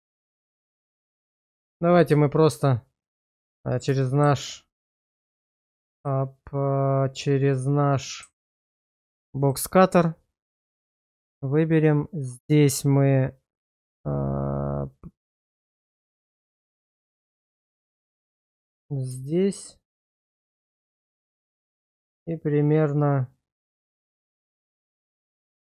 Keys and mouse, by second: 0.2 middle click, 1.6 middle click, 2.3 middle click, 4.0 shift+middle drag, 5.0 drag, 9.5-11.6 drag, 13.7-18.7 drag, 19.3 shift+middle drag, 20.1 click, 25.3 space.